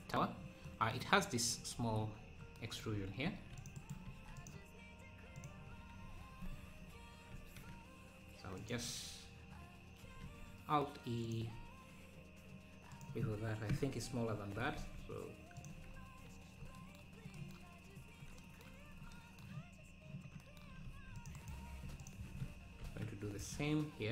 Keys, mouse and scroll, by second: 0.1-0.7 scroll up 1, 0.7-1.8 middle drag, 1.8 Tab, 2.0 scroll up 3, 3.3 ctrl+r, 4.1 ctrl+r, 6.0-6.7 scroll up 2, 7.4 ctrl+b, 10.2 alt+e, 13.7 ctrl+KP_Add, 14.5 s, 15.7 Tab, 16.2 scroll down 2, 16.3 `, 18.0 `, 18.8 Tab, 19.7 scroll down 2, 20.8 ctrl+r, 22.0 alt+shift+click, 22.8 ctrl+b.